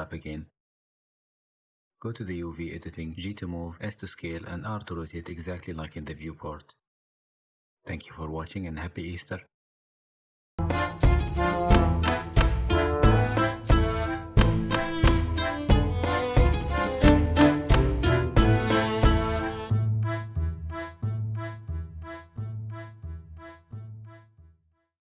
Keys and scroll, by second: 0.0 u, 3.6 s, 4.9 g, 5.6 s, 6.5 g, 8.1 s, 9.5 s, 9.6 g, 11.8 s.